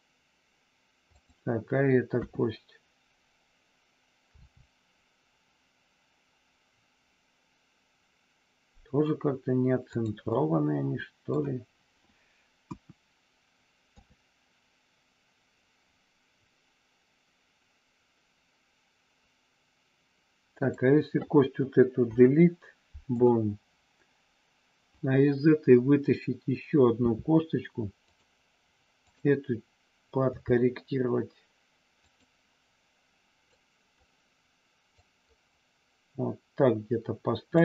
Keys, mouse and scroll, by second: 1.1 click, 2.1 KP_1, 4.3 r, 9.9 click, 10.2-11.3 middle drag, 12.6 KP_1, 13.9 KP_3, 22.1 Delete, 27.0 e, 28.0 click, 30.2 g, 32.1 click, 33.5 click, 35.0-37.5 drag.